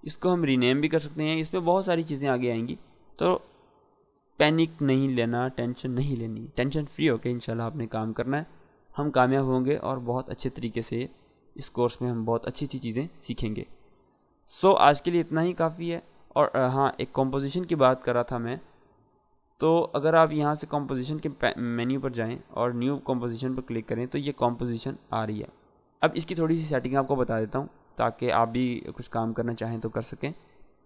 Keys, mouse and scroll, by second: 15.4-16.1 drag, 20.8 click, 27.7 click.